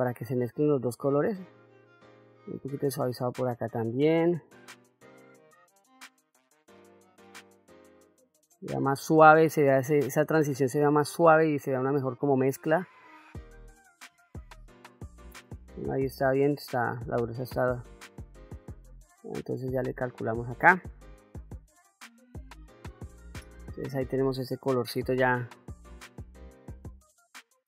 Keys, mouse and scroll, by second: 4.8 middle click, 5.7-10.9 drag, 11.1 middle click, 12.1-13.3 drag, 14.0 shift+f, 16.0 middle click, 17.1-20.1 drag, 20.5 click, 22.0 middle click, 23.1 middle click, 25.1-27.3 drag, 27.3 middle click.